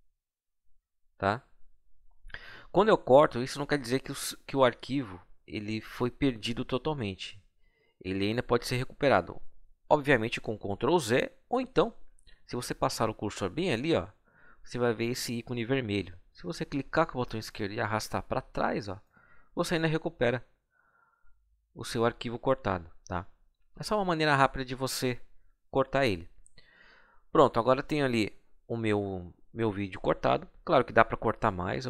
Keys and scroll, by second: 0.3 Delete, 23.3 ctrl+z.